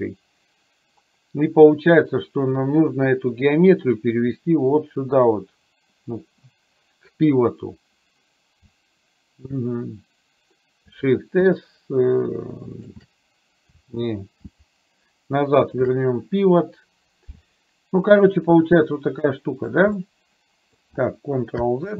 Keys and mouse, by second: 11.3 shift+s, 18.1-19.7 drag, 20.1-20.7 middle drag.